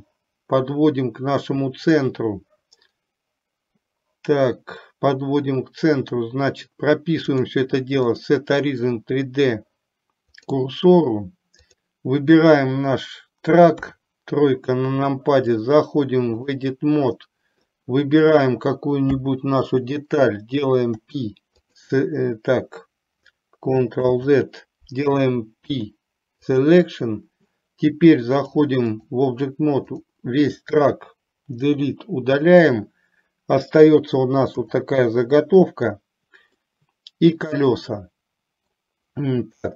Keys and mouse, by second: 7.4-10.8 drag, 11.8 click, 13.9 KP_3, 15.8-16.9 drag, 17.3 middle click, 18.4 click, 21.0 Delete, 24.1 ctrl+z, 25.8 p, 28.5 click, 30.0 click, 31.6 Delete, 34.6 KP_7, 36.8-37.4 middle drag, 38.0-38.8 middle drag, 39.5 KP_3.